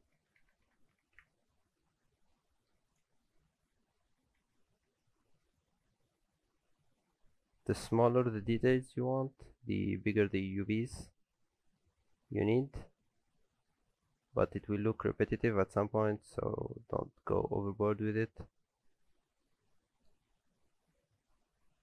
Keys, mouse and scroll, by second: 0.6 KP_0, 2.1-2.6 scroll up 4, 2.3 middle click, 2.9 click, 3.5 Tab, 4.2 a, 4.8 s, 8.2 alt+a, 8.5 Tab, 8.8-11.1 scroll down 4, 9.2-11.1 scroll up 1, 11.1 Tab, 11.1-11.4 scroll up 1, 11.5 middle click, 11.9 a, 12.2 scroll down 1, 12.8 scroll down 4, 13.5-14.6 scroll up 2, 13.5 s, 16.5 alt+a, 16.8 Tab, 17.0 middle click, 20.4 Tab, 20.8 a, 21.2-21.8 scroll down 4, 21.5 a.